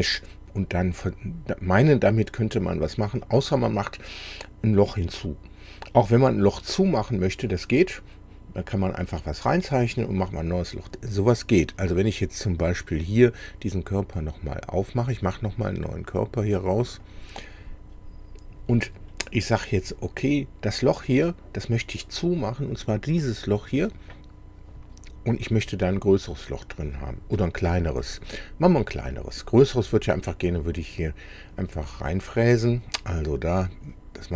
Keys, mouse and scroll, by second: 12.7 click, 17.0 click, 19.1 middle click, 28.1-29.3 middle drag, 29.5-29.9 scroll up 1, 30.1 middle click.